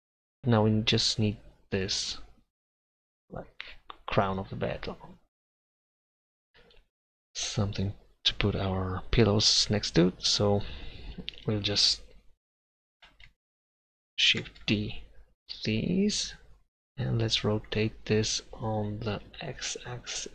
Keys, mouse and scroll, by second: 5.9 middle click, 14.5 shift+d, 17.6 r.